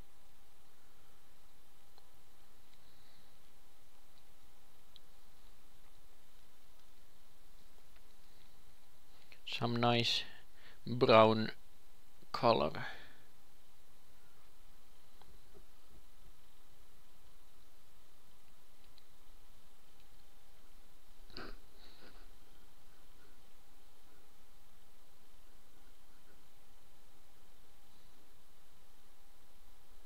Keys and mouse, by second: 21.0 ctrl+c, 23.5 ctrl+v, 26.3 ctrl+l, 29.5 ctrl+s.